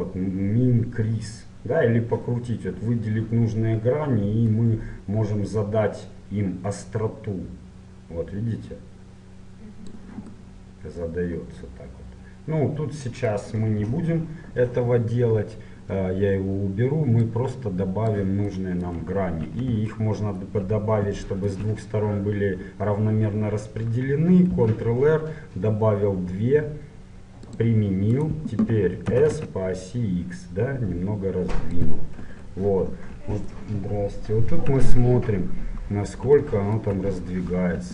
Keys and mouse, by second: 4.5-6.4 drag, 10.4-12.2 middle drag, 17.3-19.2 drag, 19.2-26.5 middle drag, 24.6 ctrl+r, 29.1 s, 32.2 KP_1, 32.8 middle click, 35.5 middle click, 37.2 middle click.